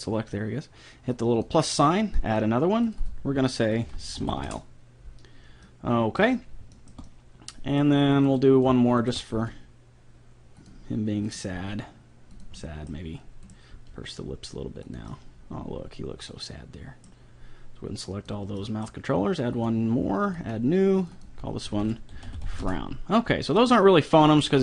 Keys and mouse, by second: 1.1-4.8 drag, 5.7-6.9 middle drag, 8.4 click, 8.4-10.9 right drag, 9.3 g, 11.5-13.1 right drag, 11.6 g, 12.6 click, 13.5 right click, 13.7 g, 14.5 right click, 15.2 middle click, 15.4 middle click, 18.1-21.3 drag, 21.5-23.1 drag, 24.1-24.6 drag.